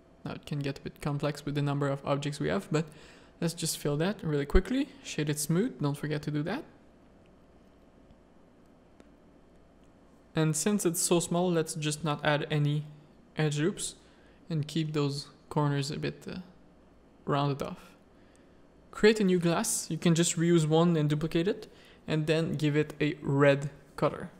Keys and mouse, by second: 0.0 Tab, 0.2 a, 0.5 z, 1.4 click, 1.8-4.1 typing, 2.4 click, 2.9 Tab, 3.5 click, 4.0 Tab, 5.0-6.0 drag, 6.5 middle click, 7.2 Tab, 7.6 alt+a, 8.0 z, 11.8 click, 13.0-14.8 drag, 17.2-21.5 drag, 20.5 s, 22.5 click.